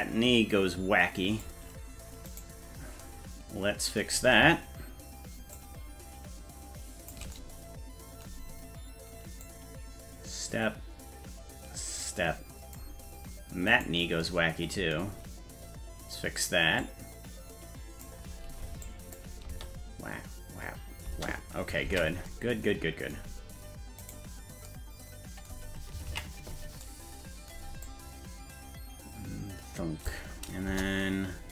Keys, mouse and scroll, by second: 2.3 right click, 5.5-7.1 shift+drag, 9.4-12.8 drag, 13.7 right click, 16.8-18.0 drag, 18.8 click, 19.4 space, 21.0 space, 22.0 ctrl+s, 24.0 right click, 26.2 ctrl+s, 27.8-30.1 drag, 30.7 KP_0.